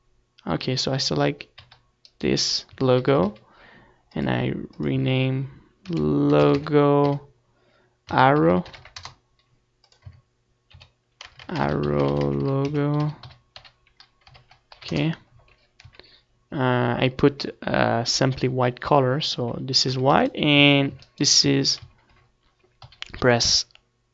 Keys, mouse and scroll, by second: 1.1 ctrl+s, 1.6 z, 2.4 z, 2.9-5.4 middle drag, 5.7 middle click, 5.8-7.6 right drag, 6.7 z, 6.7 2, 7.7 Tab, 8.1-14.0 right drag, 8.1 a, 8.2 a, 20.9 z, 21.2 middle click, 21.4-24.1 drag, 21.6 Tab.